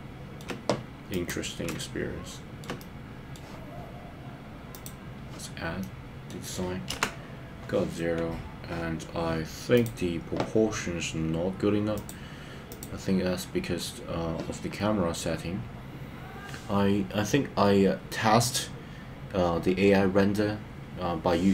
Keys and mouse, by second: 1.7 shift+middle click, 2.8 middle click, 5.8 middle click, 7.0 KP_0.